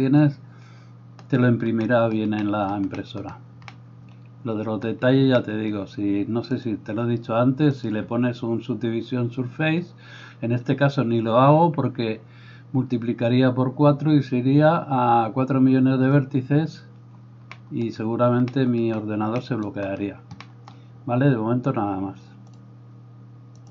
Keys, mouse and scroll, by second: 6.7-23.7 drag.